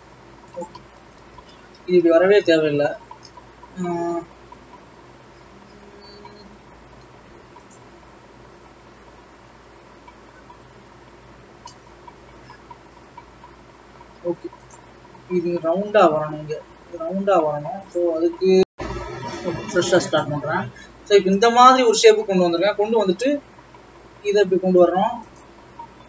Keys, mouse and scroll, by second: 0.8 click, 1.1-2.1 ctrl+z, 2.4 ctrl+z, 2.9 ctrl+z, 6.2 e, 15.0 click, 16.8 scroll down 1, 20.0 KP_1, 20.4-20.9 scroll up 2, 20.9-22.3 scroll down 2, 22.6-23.1 scroll down 3, 23.1 e, 25.5 scroll up 2.